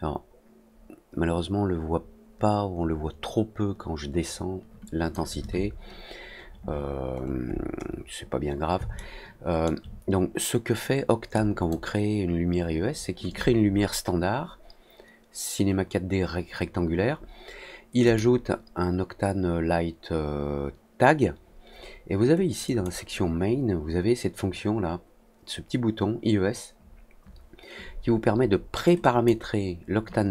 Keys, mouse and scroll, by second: 7.1 alt+middle click, 7.4 alt+scroll down 1, 7.5 alt+middle click, 7.7 alt+middle click, 8.9 alt+middle click, 11.3 click, 18.0 click, 22.6 click, 28.9 click.